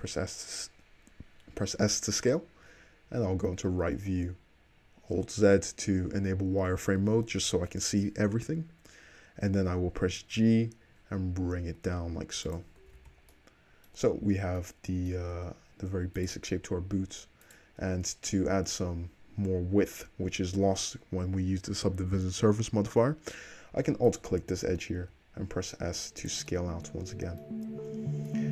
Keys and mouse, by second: 2.1 `, 2.7-4.3 middle drag, 4.3-5.5 alt+drag, 5.2 alt+z, 5.5-11.6 middle drag, 10.0 g, 11.6-12.6 shift+drag, 12.6 middle click, 12.9 alt+click, 13.0 alt+z, 13.1-14.2 middle drag, 14.2 Tab, 15.4 Tab, 16.0 alt+click, 18.4-21.8 middle drag, 19.8 2, 22.8-23.8 middle drag, 24.1 alt+click, 25.1 s, 26.5-28.5 middle drag.